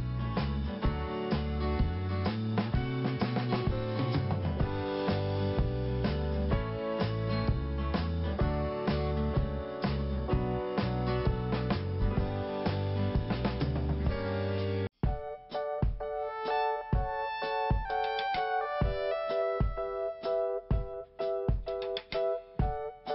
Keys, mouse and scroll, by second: 0.8 scroll up 1, 6.4 click, 7.5 click, 8.5 click, 8.6 click, 8.8 double click, 9.7 double click, 12.6 click, 13.0 click, 13.1 double click, 13.2 double click, 13.9 click, 17.4 click, 18.7 click, 19.9 click, 22.6 click.